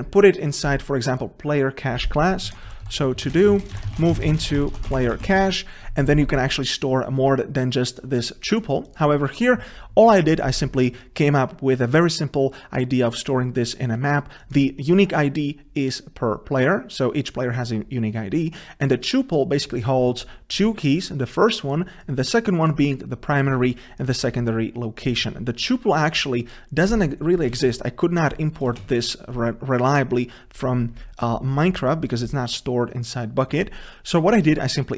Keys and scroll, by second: 27.8 ctrl+space.